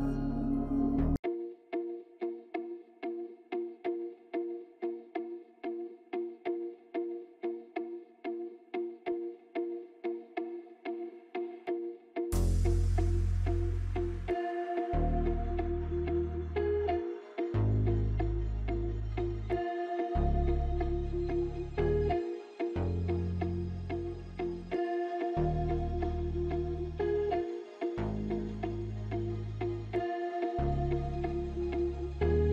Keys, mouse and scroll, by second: 1.8-2.2 alt+scroll down 2, 2.8 alt+scroll down 1, 5.0 F9, 5.5 alt+scroll up 1, 5.9 space, 6.0 click, 6.3 space, 6.7 click, 7.9-14.7 drag, 15.3 alt+scroll up 1, 15.8 space, 15.9-17.8 drag, 17.8 space, 18.5 scroll down 2, 20.7 click, 21.4 alt+scroll down 1, 22.5-23.4 scroll up 1, 23.9 F9, 24.8-27.9 drag, 29.4 F9, 30.5-32.5 drag.